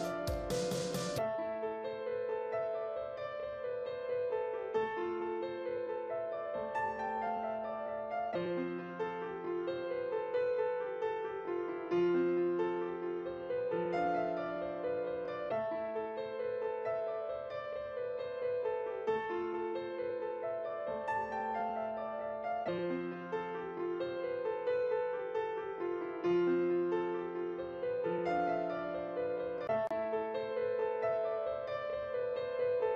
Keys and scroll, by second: 6.9 ctrl+t, 25.3 ctrl+e.